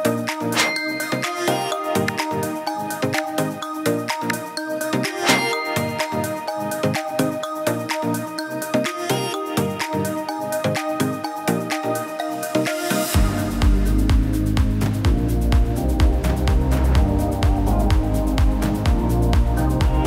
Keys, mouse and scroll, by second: 0.4-1.3 middle drag, 3.3-5.7 drag, 6.9-9.4 drag, 11.1-12.0 middle drag, 13.8-14.4 drag, 17.9-20.0 drag.